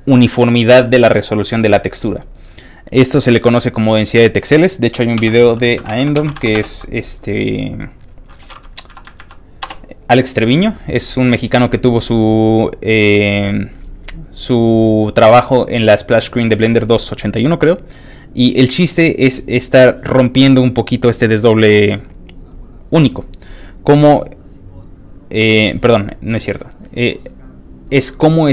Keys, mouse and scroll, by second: 5.1 ctrl+t, 5.5-6.9 typing, 8.9 Down, 9.6 Return, 15.0 click, 16.9 click, 17.9 click, 19.2 click, 20.1 click, 23.1 click, 24.7 click, 25.2 click.